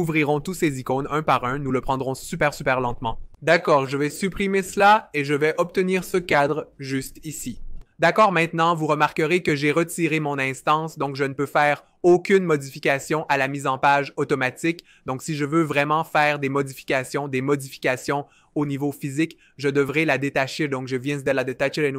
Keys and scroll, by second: 4.4 BackSpace, 20.0 alt+super+b.